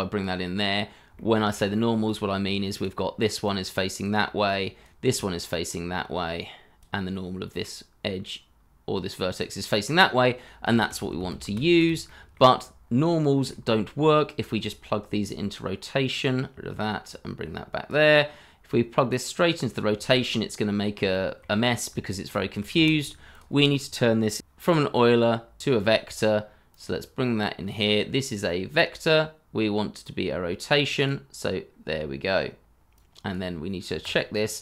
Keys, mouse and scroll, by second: 0.8 scroll up 1, 1.3 shift+middle click, 1.6 scroll up 1, 10.7 ctrl+z, 12.0 shift+middle click, 12.5-12.8 scroll up 1, 13.5 shift+middle click, 14.7 shift+middle click, 17.1 ctrl+right click, 20.2 scroll down 1, 20.7 scroll up 1, 21.1 shift+middle click, 22.0 shift+middle click, 22.8 shift+a, 24.4 u, 31.7 scroll down 1.